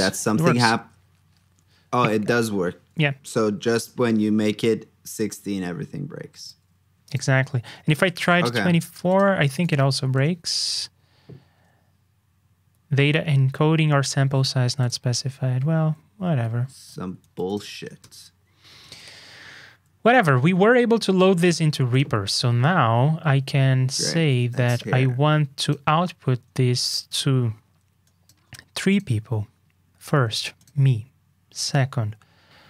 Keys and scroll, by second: 9.4 super+c, 9.8 super+v, 15.1 super+z, 17.2 super+c, 17.7 super+v, 18.8 super+Tab.